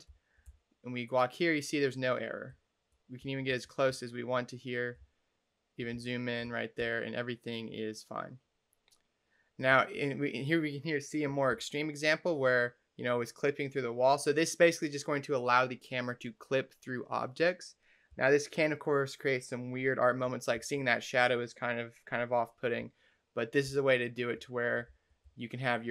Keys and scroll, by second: 0.3 d, 2.3-6.9 typing, 9.6 a, 11.4 d, 18.0 a, 20.5 d, 22.6-25.2 typing.